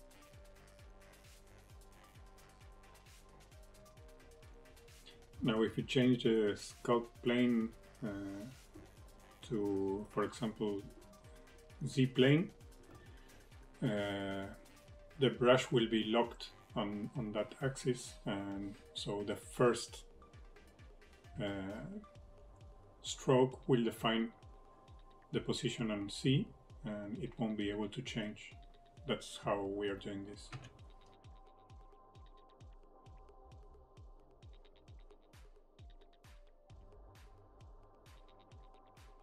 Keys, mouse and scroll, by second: 0.4 click, 1.2 middle click, 1.2-1.6 scroll up 2, 1.5 middle click, 1.7 shift+middle click, 1.8 middle click, 3.3 click, 3.8 middle click, 4.6 click, 10.3 click, 13.2 click, 18.0 f, 21.5 click, 24.8 middle click, 25.3 middle click, 25.9 click, 28.2 middle click, 29.1 click, 31.0 middle click, 32.9 middle click, 35.1 click, 36.5 middle click, 36.9 middle click, 37.3 click.